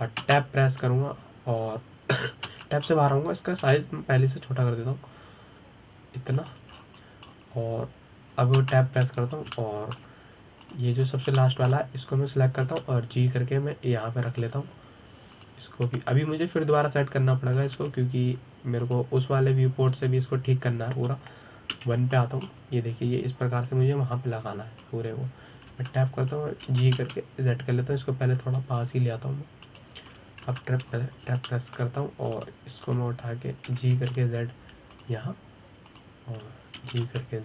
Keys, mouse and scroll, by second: 0.0 KP_7, 0.6-1.0 scroll down 4, 1.0-1.9 scroll up 2, 1.9 Tab, 4.2 Tab, 4.5-5.3 scroll down 2, 5.3 s, 8.4-10.3 scroll up 11, 10.3 Tab, 10.9-11.2 scroll down 2, 11.2-12.3 shift+middle drag, 12.3 click, 12.7-13.1 scroll up 3, 13.1-14.3 shift+middle drag, 14.3 g, 17.0 click, 17.5 g, 19.2 click, 23.4 KP_1, 24.1-26.1 scroll down 2, 26.1-26.5 scroll up 1, 26.5-27.4 scroll down 4, 27.4 Tab, 28.3 g, 32.1 Tab, 32.6 scroll up 4, 33.1 shift+middle click, 34.0 click, 34.5 click, 35.4 g, 36.7 drag.